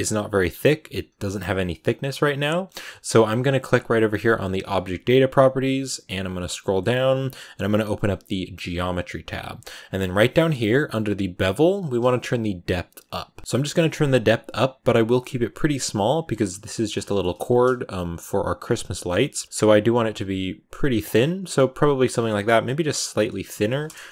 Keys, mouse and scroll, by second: 1.1-4.5 scroll up 1, 4.5-12.4 scroll up 1, 12.4-14.9 shift+drag, 16.5 middle click, 17.1-19.4 scroll up 2, 19.4-21.0 shift+drag, 21.0-21.4 scroll down 9, 21.4 middle click, 21.9 scroll up 8.